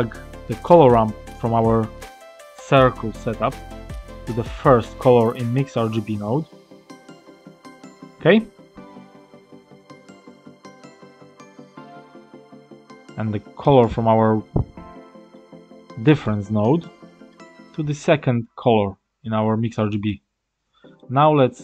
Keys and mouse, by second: 0.2-2.3 drag, 4.0-5.6 drag, 6.0 middle click, 7.1 click, 12.7-13.8 middle drag, 15.2 middle click, 17.2-19.9 drag, 20.9 middle click.